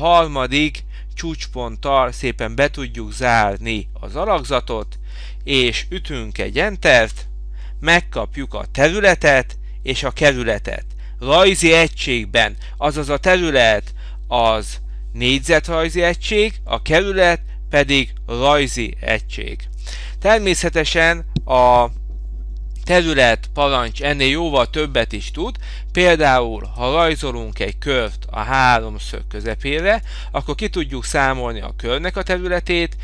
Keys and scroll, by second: 7.1 Return.